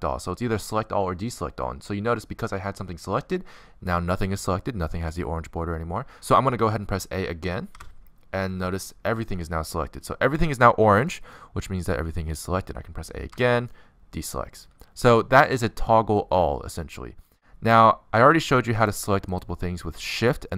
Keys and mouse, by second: 3.2-6.4 middle drag, 7.9 a, 10.9 click, 12.2 middle click, 13.5 middle click, 14.0 a, 14.2-15.3 middle drag, 16.2 middle click, 16.7 middle click, 20.1 click, 20.3-20.5 right drag.